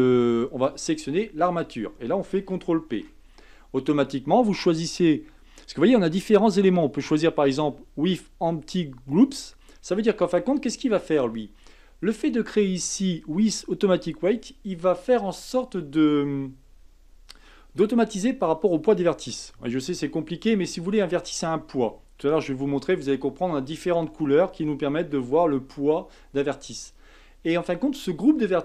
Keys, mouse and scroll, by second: 2.9 ctrl+p.